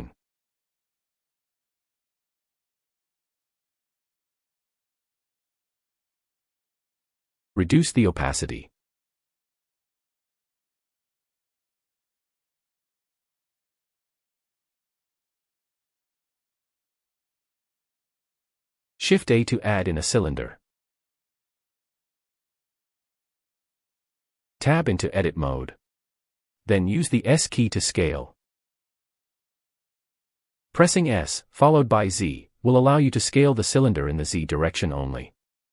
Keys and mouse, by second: 9.7 click, 11.0-15.7 drag, 19.6 shift+a, 24.8 Tab, 27.6 s, 31.6 click, 33.1 s, 33.5 z.